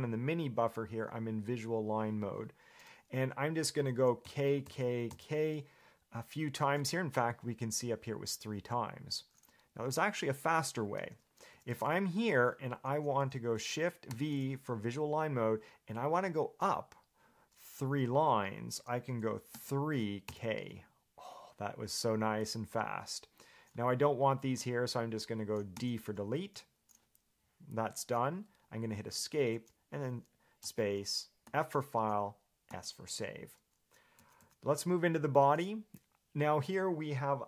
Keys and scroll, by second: 4.5 k, 4.9 k, 5.3 k, 11.2 Escape, 11.7 j, 11.9 j, 12.0 j, 14.3 shift+v, 19.7 3, 20.5 k, 25.9 d, 29.4 Escape, 34.4 j, 34.6 j.